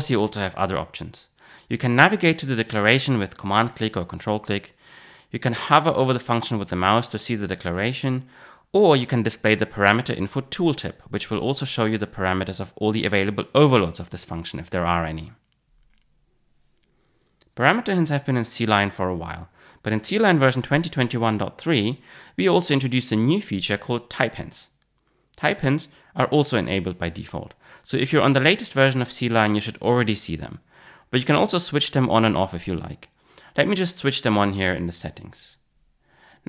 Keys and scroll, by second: 3.6 super+b, 5.1 alt+super+[, 9.7 super+p.